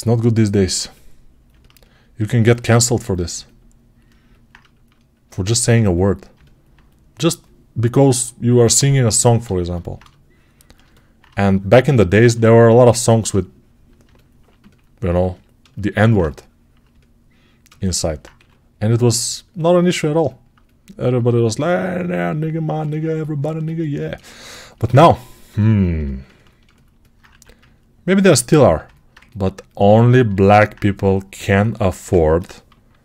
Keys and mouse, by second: 0.1-17.5 ctrl+alt+right drag, 12.0 1, 18.2 2, 25.4-30.6 alt+shift+drag, 27.2 1, 30.6-33.0 shift+right drag.